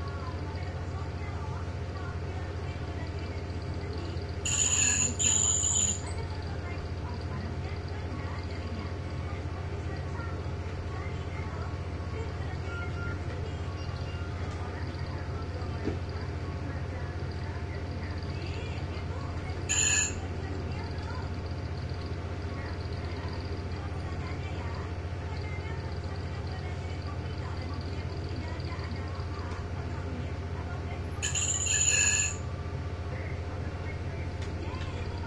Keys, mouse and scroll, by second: 3.8 click, 5.8 click, 6.6-7.4 ctrl+scroll down 1, 8.3 click, 9.7-11.0 drag, 13.0 ctrl+g, 14.8 1, 15.6 click, 17.5 click, 19.5 ctrl+g, 20.6 shift+click, 22.5 click, 25.2 click, 28.3 click, 29.1 click, 30.9 shift+click, 32.3 click, 33.5 click, 34.9 shift+Right.